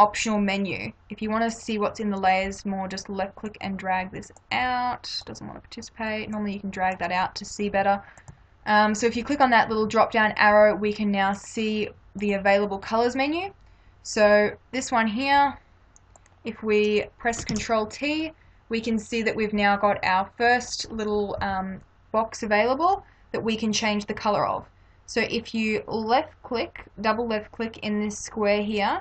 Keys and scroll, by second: 17.5 ctrl+t, 21.4 Return.